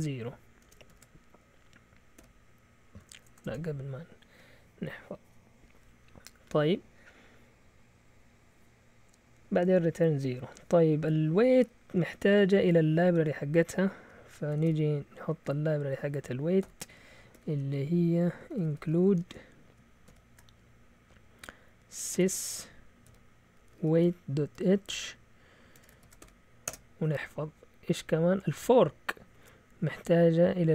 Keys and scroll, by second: 0.0-3.7 typing, 9.7 Down, 11.1 Up, 11.5 Up, 14.5 typing, 16.6-20.0 typing, 21.8-26.5 typing, 26.7 Return.